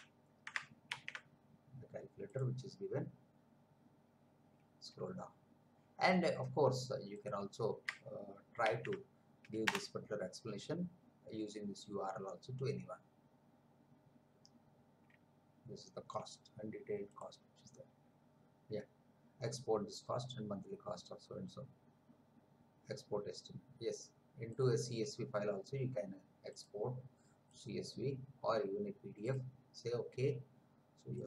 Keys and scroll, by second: 0.9 ctrl+v, 8.6 ctrl+v, 9.6 Return.